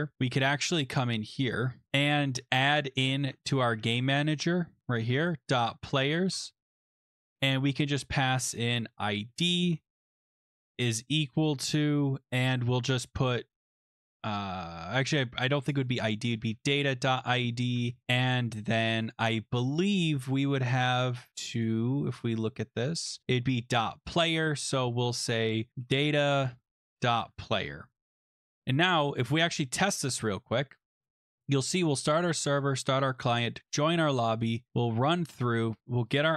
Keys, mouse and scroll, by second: 1.1 click, 1.5 click, 1.9 click, 1.9 BackSpace, 2.0 click, 3.2 Return, 3.4-11.0 typing, 13.0-13.7 typing, 14.4 click, 15.7 click, 15.8 click, 16.1-17.6 typing, 17.7 Page_Down, 17.9 Right, 18.3-18.9 scroll, 19.0 click, 19.3 typing, 21.1 click, 21.3 click, 21.6 click, 24.7 click, 25.4-27.9 typing, 28.7 click, 29.9 click, 30.1-31.0 typing, 31.2 click, 31.6 click, 32.1 click, 33.1 click, 34.7 click, 35.8 click, 36.1 click.